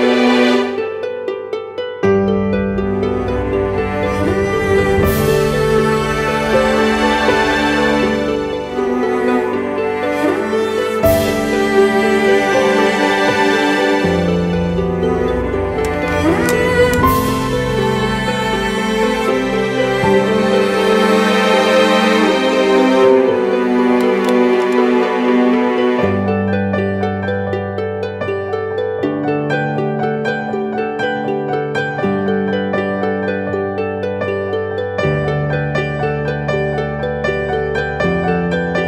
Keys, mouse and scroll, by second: 3.3 alt+shift+click, 4.9 Return, 30.5 ctrl+-, 37.5 ctrl+z.